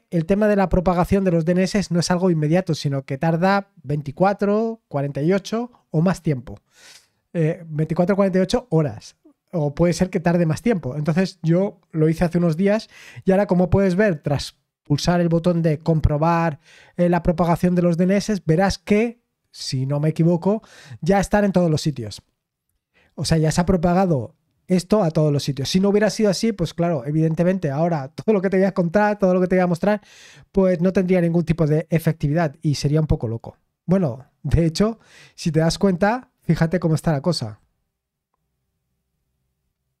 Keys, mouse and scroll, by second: 12.4 click, 34.8-39.2 scroll down 1, 39.2-40.0 scroll up 1.